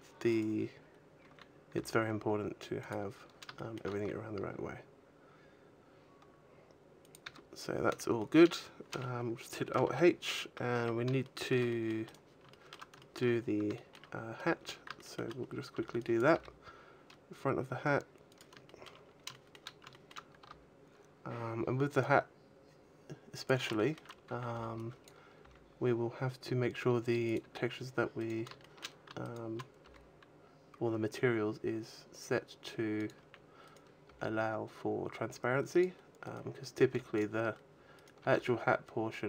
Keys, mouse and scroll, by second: 0.0 right click, 0.6 scroll down 3, 1.0 a, 1.6 g, 2.9 click, 2.9 scroll up 3, 3.1 shift+middle click, 3.6 g, 7.0 click, 7.1 a, 7.5-8.0 scroll down 3, 7.7 a, 8.0 middle click, 9.7 alt+h, 10.6 a, 11.1 shift+middle click, 11.5 middle click, 11.9 right click, 12.3 shift+middle click, 12.8 shift+middle click, 13.2 scroll down 2, 13.6 shift+middle click, 14.0-14.4 scroll down 2, 14.8 shift+middle click, 15.9 b, 16.2 g, 18.2 click, 18.5 shift+middle click, 18.9 scroll up 3, 19.1 shift+middle click, 19.5-19.8 scroll up 1, 19.8 shift+middle click, 20.3 g, 23.3 click, 23.6 shift+middle click, 24.1 a, 24.4 b, 25.1 g, 27.1 click, 27.1 a, 28.0 right click, 28.5 shift+middle click, 29.1 shift+right click, 29.7 g, 32.8 click, 33.0 a, 33.5 right click, 33.9 g, 35.7 click, 36.1 right click, 36.7 g, 37.0 click, 37.8 right click, 38.0 g.